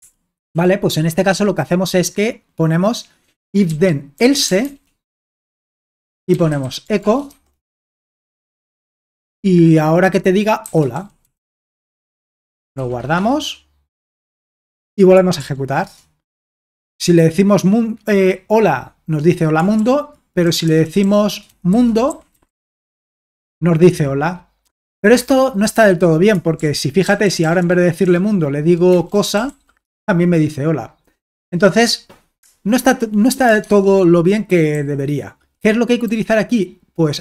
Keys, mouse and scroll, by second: 0.0 typing, 3.4-5.1 typing, 5.6 Return, 6.3-7.8 typing, 10.4-13.3 typing, 14.5 alt+Tab, 15.4 ctrl+p, 15.8 Return, 19.8 ctrl+p, 20.5-23.1 typing, 23.3 Return, 26.6 ctrl+p, 27.0-29.9 typing, 33.7 alt+Tab, 34.7 k, 36.1 h.